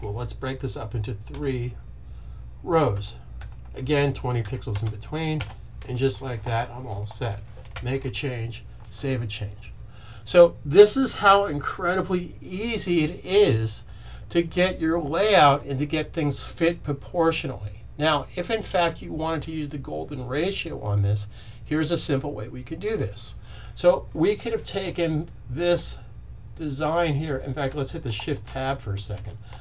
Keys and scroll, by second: 1.2 3, 3.4-4.9 typing, 28.4 Tab.